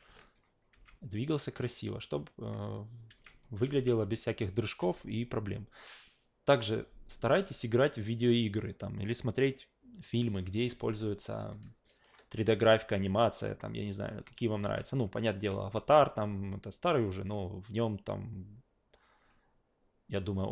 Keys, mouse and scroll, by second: 0.2 alt+right click, 0.5 alt+middle click, 0.7 alt+v, 1.1-2.1 alt+drag, 3.1 alt+v, 3.2 alt+middle click, 3.6 alt+v, 4.8 alt+v, 5.1 click, 11.2-12.1 alt+drag, 14.1 click, 14.6 alt+v, 15.5 alt+v, 16.5 alt+click.